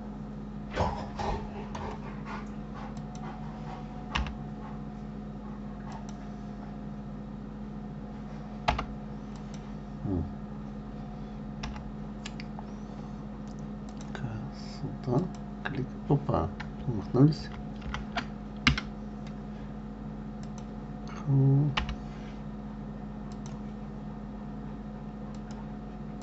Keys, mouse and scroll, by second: 3.3 click, 4.5 k, 9.6 click, 12.0 k, 20.7 click, 22.1 k.